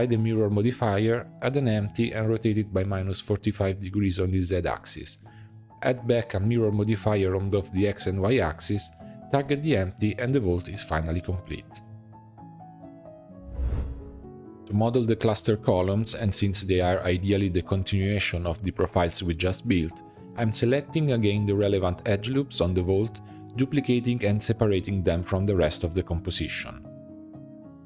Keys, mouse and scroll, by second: 0.9-1.7 middle drag, 1.7 scroll down 2, 2.0 shift+a, 3.0 middle click, 3.4 r, 4.8 click, 5.7-7.9 drag, 8.7 click, 11.3-11.6 drag, 11.6-13.3 middle drag, 14.0 middle click, 14.2 h, 15.3 click, 15.6 h, 16.2 click, 16.4 h, 16.7 middle click, 17.3 click, 17.6 Tab, 17.8 middle click, 18.3 2, 18.6 scroll up 2, 19.7 alt+click, 20.0-21.4 middle drag, 21.4 alt+shift+click, 21.7-22.9 middle drag, 22.9 alt+shift+click, 23.3 scroll down 2, 23.6 middle click, 24.3 shift+d, 25.5 p, 26.3 Tab, 26.5 click, 27.2 click, 27.6 drag.